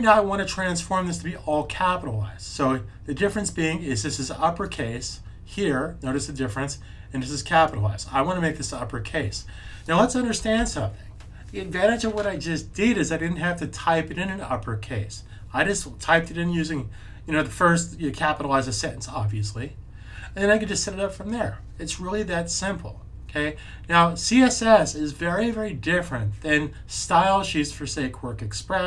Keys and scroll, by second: 10.4 super+s.